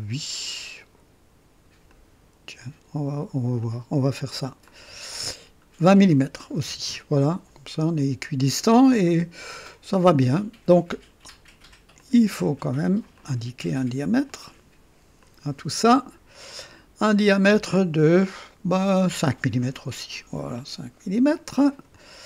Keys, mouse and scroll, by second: 1.8 click, 3.5 click, 4.6 click, 6.4 KP_2, 6.6 KP_0, 6.8 Return, 7.9 typing, 11.9 click, 13.1 click, 14.3 click, 15.2 click, 16.4 click, 19.0 KP_5, 19.5 KP_Enter, 19.5 Return, 21.5 click.